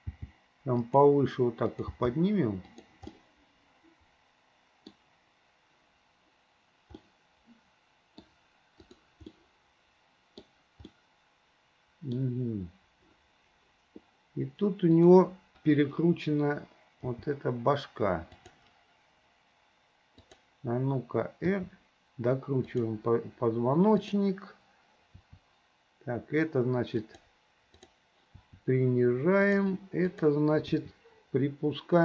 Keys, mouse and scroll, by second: 0.2 g, 1.7 click, 2.0 g, 3.1 scroll up 1, 3.3-5.0 middle drag, 5.0-7.0 scroll down 1, 7.0 scroll up 1, 7.2-8.3 middle drag, 8.3-8.8 scroll down 1, 8.8 click, 9.4-10.5 middle drag, 10.9-12.2 middle drag, 15.0 click, 17.1 g, 20.2 click, 21.5 r, 24.0 click, 25.2 r, 28.4 r, 30.1 click, 30.7 r.